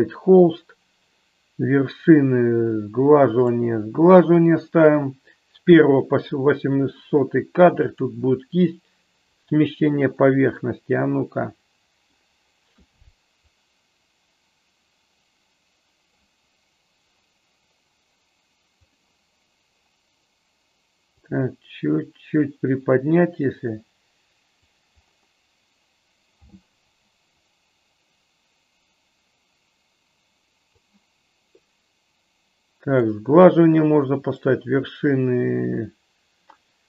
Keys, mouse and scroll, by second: 3.5 click, 7.9-9.6 drag, 10.7-12.1 middle drag, 13.6 click, 21.1-24.6 drag, 27.5-30.9 drag, 33.0 click, 34.2-36.8 drag.